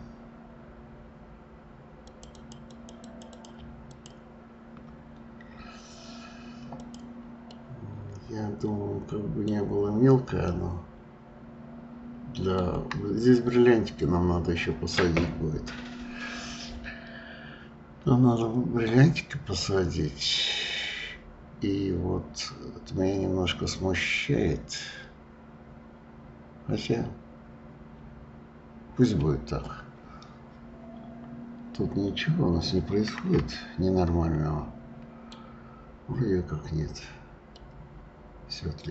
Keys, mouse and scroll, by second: 2.1 click, 2.3 click, 2.7 click, 3.0 click, 3.3 click, 3.6 Escape, 3.9 click, 4.1-4.7 Escape, 6.7 click, 7.5-9.5 middle drag, 9.5 scroll down 2, 10.4-12.7 middle drag, 12.7-14.3 scroll down 1, 14.3-15.7 scroll up 4, 15.7-16.4 scroll up 1, 30.4 scroll up 1, 31.2-31.5 scroll up 4, 32.1-32.7 scroll up 2, 33.5-36.6 shift+middle drag, 37.5-38.9 middle drag.